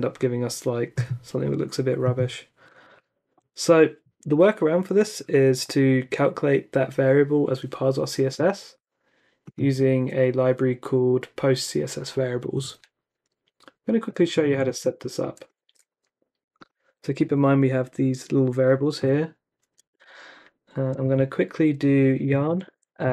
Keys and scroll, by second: 15.6 super+c, 20.0 super+Tab, 20.9 super+Tab, 22.0-23.1 typing.